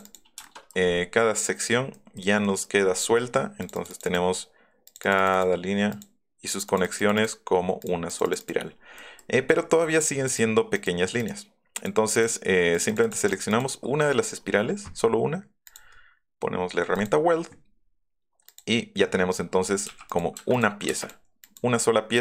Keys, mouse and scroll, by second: 0.4 shift+middle click, 1.4 middle click, 1.7 middle click, 1.9 middle click, 2.4 middle click, 3.6 click, 3.7 click, 3.9 click, 4.8 click, 5.0 click, 5.2 click, 5.4 click, 5.9 click, 6.5 click, 6.7 click, 6.8 click, 7.1 click, 7.8 click, 8.2 click, 8.4 click, 9.4 middle click, 9.7 middle click, 10.3 click, 11.2 click, 11.7 click, 12.1 click, 12.7 click, 12.9 click, 13.0 click, 13.2 click, 13.4 click, 13.5 click, 14.2 middle click, 15.7 click, 16.9 click, 17.7 middle click, 19.4-19.8 scroll up 2, 20.1 click, 20.5 click, 21.0 click, 21.4 click, 22.1 click.